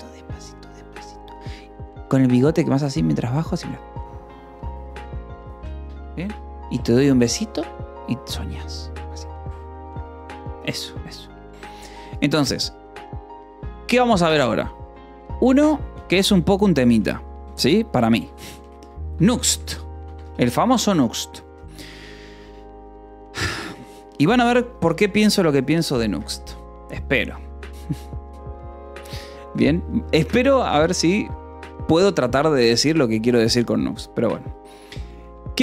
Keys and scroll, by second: 14.9 a, 17.1-21.3 typing, 19.4 Escape, 22.3 Return, 24.3-26.7 typing.